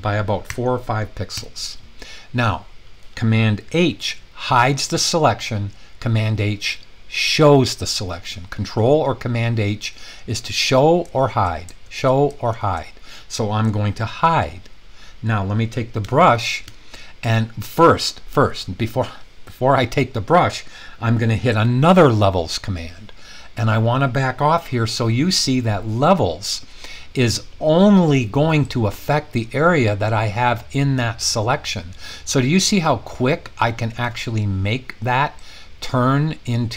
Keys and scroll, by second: 0.5 4, 1.4 Return, 4.4 super+h, 7.3 super+h, 10.4 super+h, 11.2 super+h, 11.9 super+h, 12.5 super+h, 14.3 super+h, 16.0 ], 16.2 ], 16.8 ], 19.0 typing, 22.5 super+l.